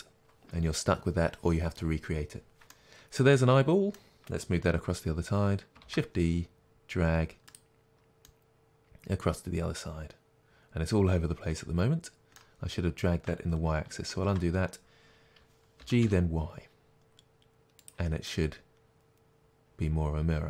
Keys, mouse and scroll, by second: 5.9 shift+d, 12.2-14.2 right drag, 14.2 ctrl+z, 15.9 g, 18.0 click, 18.5-20.4 middle drag.